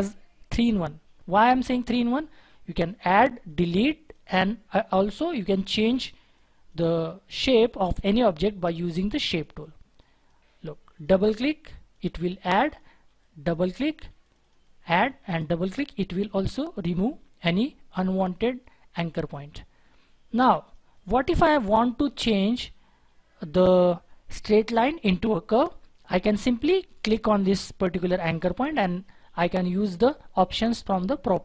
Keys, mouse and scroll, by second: 3.0 double click, 11.1 double click.